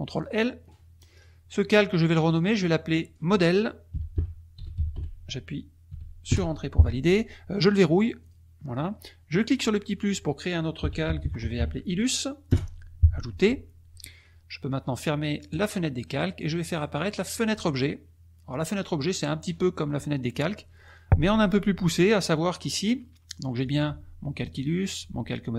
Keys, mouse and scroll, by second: 0.1 click, 2.2 click, 3.0 click, 3.9-5.2 typing, 6.3 Return, 8.2 click, 9.7 click, 11.0 l, 11.5 s, 12.5 Return, 15.5 click, 16.7 click, 17.4 click, 18.5 click, 23.6 click, 24.8 click.